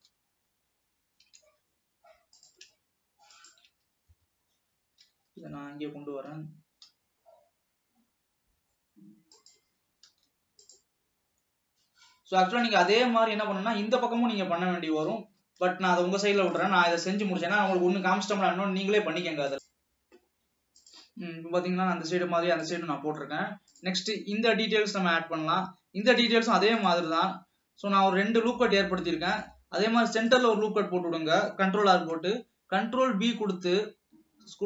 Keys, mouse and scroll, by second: 0.1 ctrl+r, 2.9 click, 3.5 alt+shift+click, 5.7 g, 10.2 ctrl+r, 15.2 alt+a, 15.7 ctrl+s, 20.1 ctrl+s, 21.6-22.8 scroll up 2, 22.8 click, 26.8 click, 27.4 Tab, 28.4 alt+a, 29.5 ctrl+r, 32.4 ctrl+b.